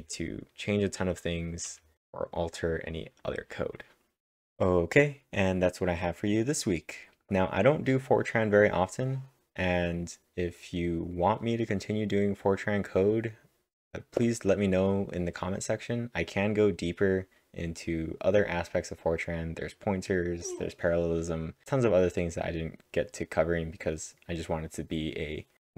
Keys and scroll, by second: 0.0-2.4 typing.